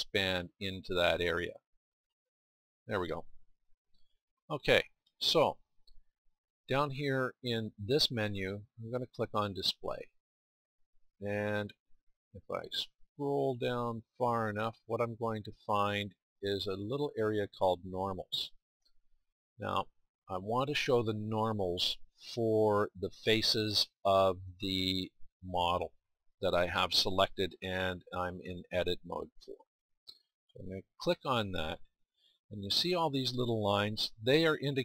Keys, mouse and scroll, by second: 3.3-8.7 middle drag, 15.9-19.3 middle drag, 34.1-34.8 middle drag.